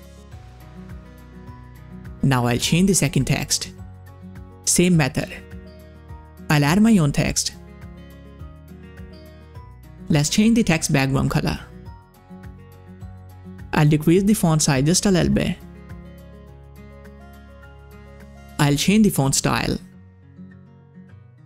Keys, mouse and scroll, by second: 0.0-0.8 typing, 1.0 click, 2.7 click, 6.0 click, 6.3 ctrl+a, 6.7-9.5 typing, 10.2 click, 11.1 ctrl+v, 12.5 ctrl+v, 12.6 click, 13.5-13.8 scroll down 1, 14.5-14.8 scroll down 1, 14.8-18.2 drag, 18.8 click, 19.2-20.6 typing, 21.1 click.